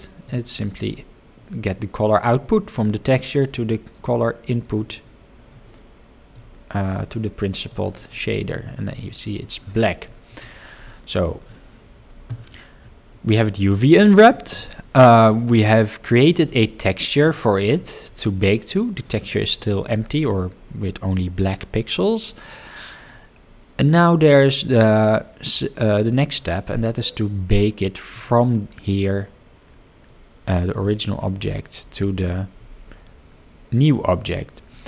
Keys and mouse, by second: 0.4-4.7 drag, 6.5 click, 6.9-7.8 drag, 8.4-9.4 middle drag, 10.0 middle drag, 10.8-11.2 middle drag, 28.1 click, 30.8 click.